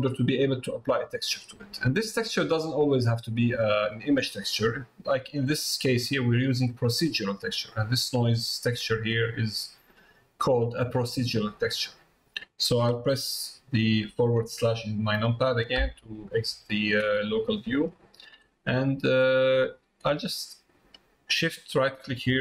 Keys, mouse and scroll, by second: 1.8 middle click, 2.8 middle click, 5.3 middle click, 6.2 middle click, 7.7-8.8 drag, 9.3-10.5 drag, 11.0 click, 17.5 middle click, 18.1 shift+middle click, 18.7 middle click.